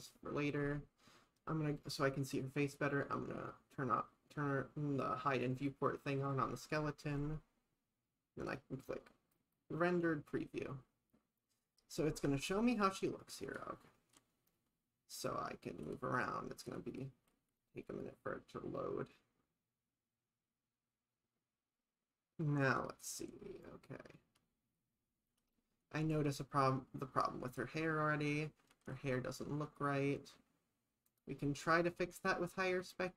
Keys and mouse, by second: 0.0 click, 0.5 click, 5.3 click.